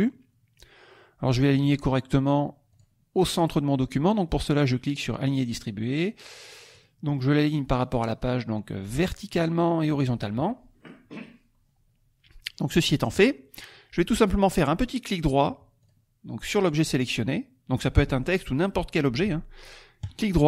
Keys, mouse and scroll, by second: 0.6-1.8 drag, 2.7 click, 6.7 click, 7.7 click, 9.3 click, 10.0 click, 15.9 click, 16.6 click, 20.0 right click.